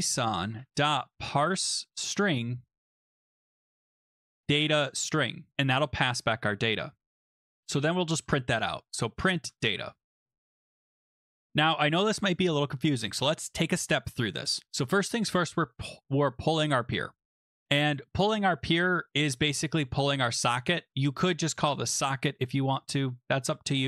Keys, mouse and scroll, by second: 0.0-5.0 typing, 1.9 Tab, 6.1 Right, 6.7 Return, 7.5-10.1 typing, 11.8 scroll down 2, 12.3 middle click, 12.4 middle click, 17.0 click, 18.0 middle click, 18.0 middle click, 21.5 click, 21.7 click.